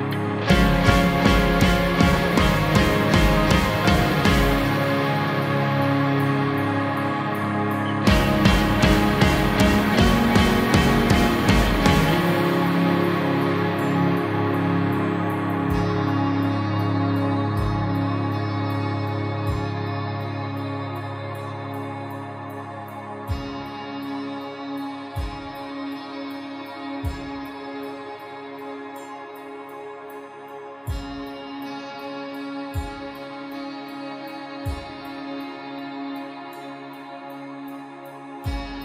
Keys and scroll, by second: 2.9 ctrl+-, 5.9 ctrl+0, 14.5 ctrl+t, 24.4 ctrl+t, 33.9 F9, 38.1 ctrl+j.